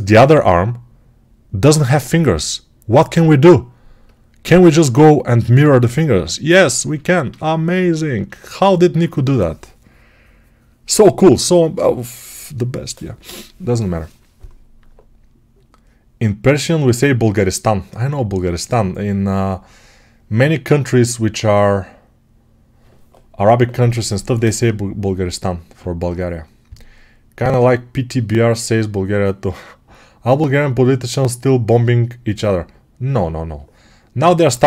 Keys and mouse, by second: 5.6-34.6 alt+drag.